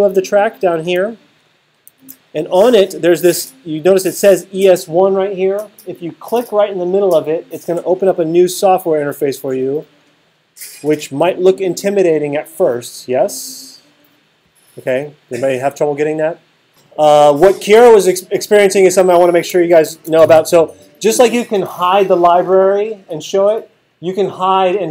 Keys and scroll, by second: 1.9 alt+super+8, 19.9 alt+super+8.